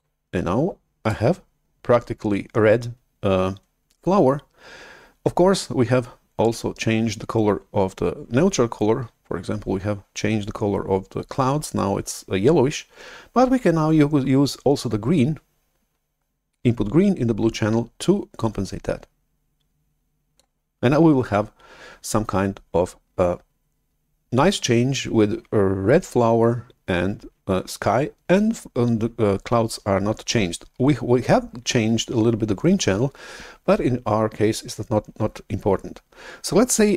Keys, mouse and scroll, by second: 18.3-20.8 drag.